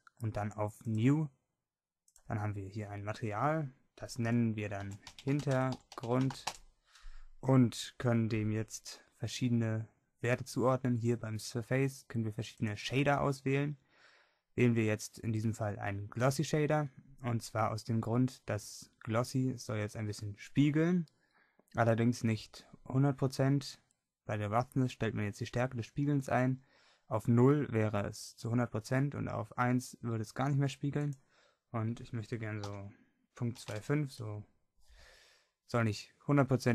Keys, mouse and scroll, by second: 12.7-15.9 drag, 31.0-36.7 drag.